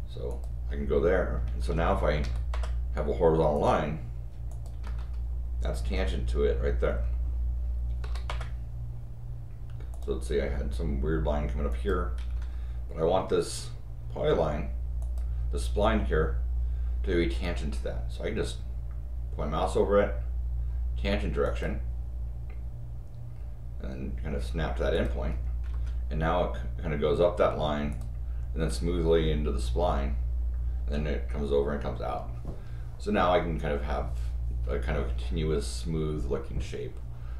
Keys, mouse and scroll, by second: 0.3 click, 1.4 Escape, 1.7 Escape, 2.2 l, 2.5 Return, 3.5 click, 4.5 click, 4.8 Escape, 5.1 scroll up 2, 6.8 scroll down 4, 8.0 l, 8.2 Return, 9.9 click, 11.7 click, 12.2 Escape, 12.3 Escape, 12.5 scroll down 1, 13.4 scroll up 1, 15.0 click, 21.4 click, 24.9 click, 25.6 Escape, 27.9 click, 29.7 scroll down 2, 30.7 Escape.